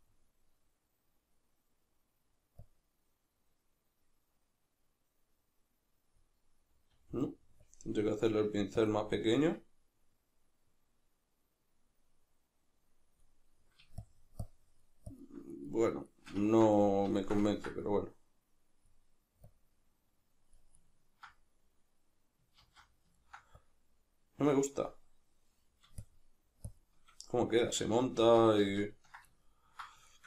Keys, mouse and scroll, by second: 0.6-7.8 drag, 8.5 f, 8.9 click, 9.5-15.7 drag, 15.7-18.3 middle drag, 18.3-23.1 drag, 22.6 ctrl+z, 23.1 ctrl+middle click, 23.8-29.4 drag, 27.8 ctrl+z, 29.4-30.2 ctrl+middle drag.